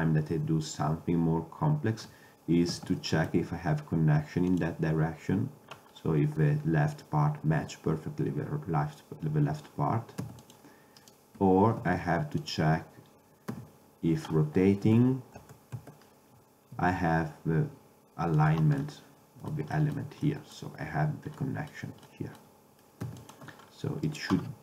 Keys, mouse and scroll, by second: 2.8 shift+d, 8.0-9.7 middle drag, 10.3 x, 11.1-12.9 drag, 11.9 shift+d, 12.7 Escape, 13.6 r, 16.8 g, 19.0 middle drag, 23.1 x, 24.1-24.6 drag.